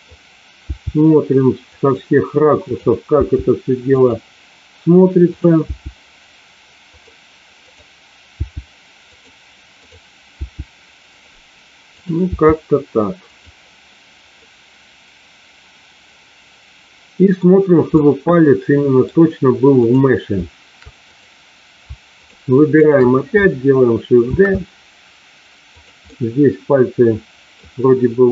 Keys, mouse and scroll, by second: 0.6 g, 1.5 click, 2.6 click, 3.1 g, 3.8 click, 5.3 click, 6.9 click, 6.9 g, 7.5 click, 9.0 click, 9.0 g, 9.8 click, 10.3 g, 11.0 click, 11.9 click, 12.3 g, 13.3 click, 14.4-17.4 middle drag, 17.9-19.0 middle drag, 19.8 click, 21.1 click, 22.8 shift+click, 24.1 shift+d, 26.0-27.5 middle drag.